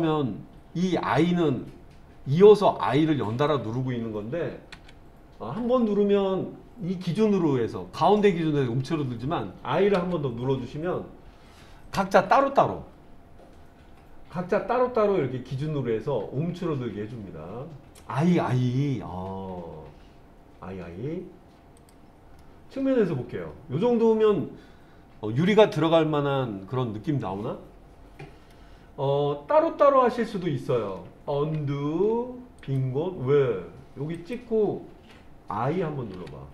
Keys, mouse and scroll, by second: 4.7 i, 10.0 i, 21.8 click, 22.4-28.6 middle drag, 31.3 ctrl+z, 32.6 click, 34.2 click, 36.1 i.